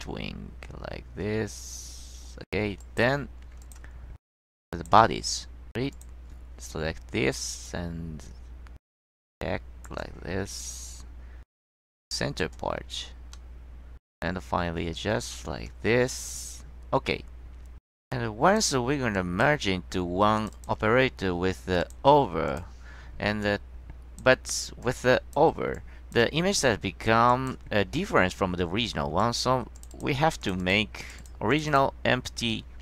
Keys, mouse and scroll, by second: 2.9 click, 3.7 click, 4.2-4.6 scroll up 2, 4.8 click, 6.0 click, 7.8-10.0 drag, 10.8-11.8 drag, 13.5-15.6 middle drag, 19.3 click, 20.5 click, 21.9 click, 22.6 click, 23.5-24.3 drag, 25.0-25.5 drag, 25.9-26.3 drag, 26.5-26.8 scroll up 1, 27.4 click, 28.0-28.4 scroll down 1, 29.3 click, 29.9 click, 30.5 click, 30.7 click.